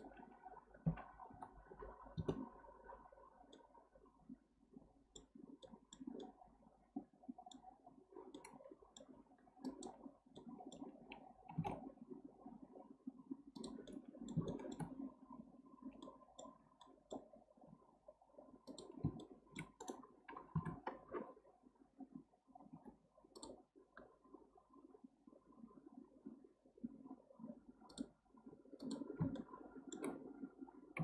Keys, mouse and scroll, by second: 3.5-9.6 middle drag, 9.6 click, 10.1 scroll up 2, 10.4-11.5 middle drag, 11.5 g, 13.9 middle click, 14.4-15.6 shift+scroll up 1, 16.0-17.6 middle drag, 17.6 k, 19.2 shift+middle click, 20.5 KP_7, 22.7 k, 29.4-31.0 shift+middle drag.